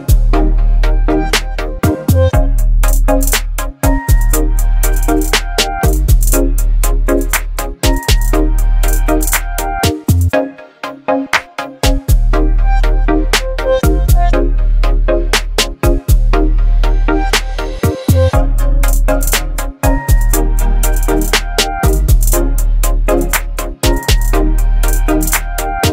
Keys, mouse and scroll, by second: 8.1 click, 8.2-9.8 drag, 10.3-11.2 typing, 13.2 click, 14.5 v, 15.3-18.5 drag, 19.5-25.1 alt+drag.